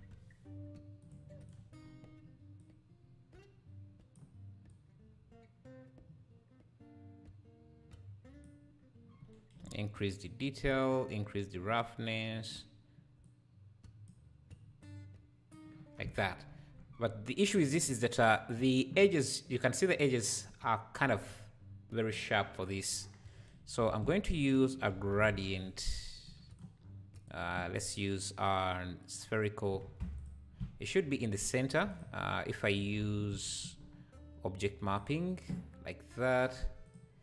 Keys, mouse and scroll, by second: 1.8 scroll up 2, 2.6-7.7 drag, 2.6 scroll up 1, 10.2-16.0 drag, 16.0 scroll down 1, 22.8 scroll down 2, 23.8 shift+a, 26.3 shift+a, 26.8 scroll up 1, 27.1-29.6 drag, 29.6-30.2 scroll down 1, 30.2 ctrl+shift+click, 31.9 ctrl+click, 32.2 ctrl+y, 32.7 ctrl+click, 33.1 ctrl+t, 33.8 scroll up 3, 34.6 click, 36.1 scroll down 1, 36.9 click.